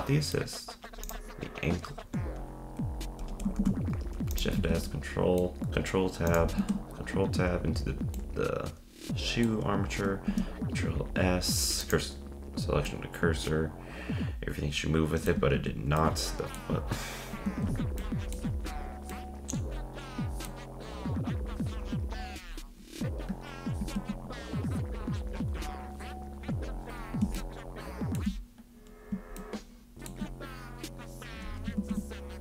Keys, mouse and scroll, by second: 1.1-2.4 drag, 3.6 shift+s, 4.6 ctrl+Tab, 4.9-5.7 middle drag, 6.3-6.6 drag, 6.7 ctrl+Tab, 8.1-9.5 middle drag, 9.5-10.2 scroll up 1, 10.2 shift+s, 12.8-15.4 middle drag, 15.4 z, 15.9-17.4 middle drag, 17.4 ctrl+Tab, 18.0 middle click, 18.4-19.1 scroll up 3, 19.1-22.1 middle drag, 22.4-23.7 scroll up 3, 23.7 scroll up 1, 24.0 ctrl+Tab, 27.4-31.8 shift+middle drag, 31.8 ctrl+Tab.